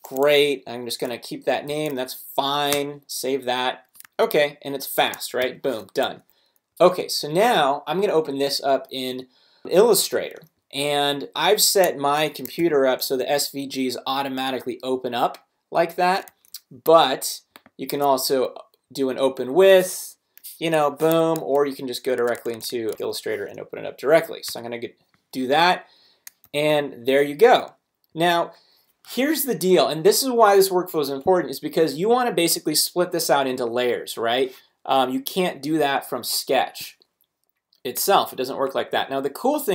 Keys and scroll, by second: 0.3 Down, 2.7 Return, 4.0 super+Tab, 5.4 alt+super+h, 6.0 alt+super+w, 6.7 super+Up, 12.6 super+i, 16.3 super+w, 16.9 ctrl+super+w, 20.8 Escape, 21.3 super+Escape, 21.4 super+Tab, 23.0 super+o, 23.9 super+Right, 24.5 Return, 26.4 super+-.